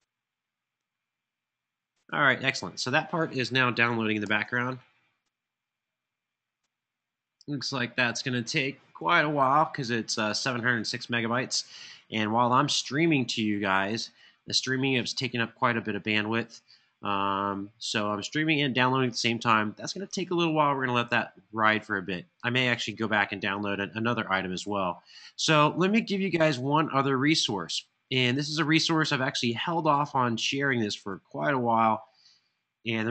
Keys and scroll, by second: 4.0 alt+super+l.